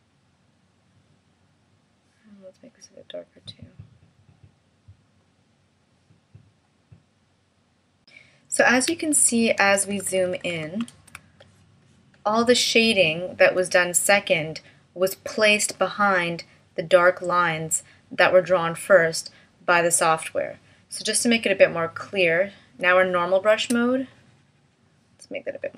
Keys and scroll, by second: 9.6 super+=.